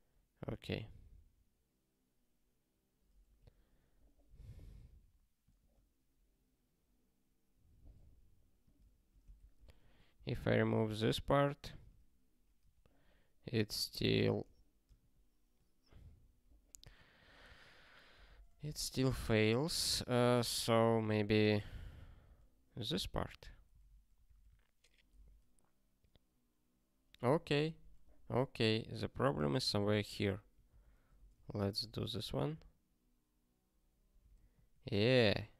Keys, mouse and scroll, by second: 10.9 super+o, 11.8 ctrl+k, 12.6 q, 13.6 ctrl+/, 14.4 q, 14.9 ctrl+/, 17.2 super+o, 17.5 ctrl+/, 24.3 super+o, 31.4 super+o, 32.9 ctrl+k.